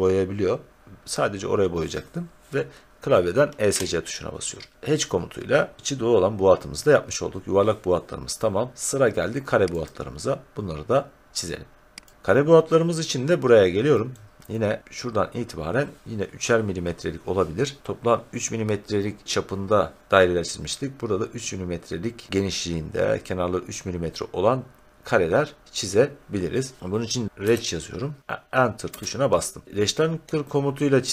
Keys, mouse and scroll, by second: 3.6 Escape, 6.7 scroll down 2, 9.8 click, 12.1 click, 12.3 scroll up 1, 12.4-14.1 scroll down 2, 14.1-16.0 scroll, 27.0-27.9 typing, 28.8 Return.